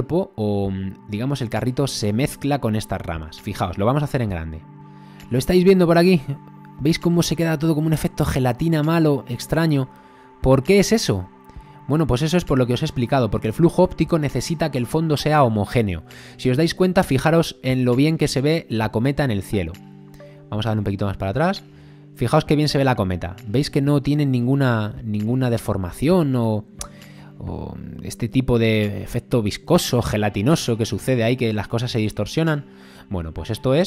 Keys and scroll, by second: 14.6 space, 21.7 space.